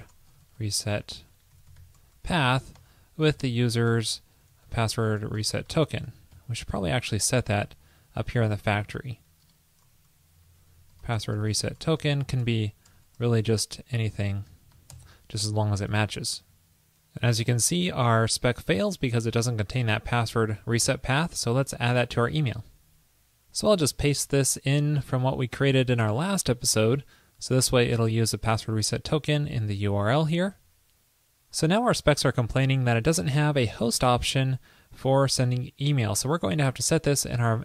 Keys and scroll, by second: 8.8 alt+Left, 16.2 super+s, 23.9 super+a, 24.9 super+v, 30.6 super+s.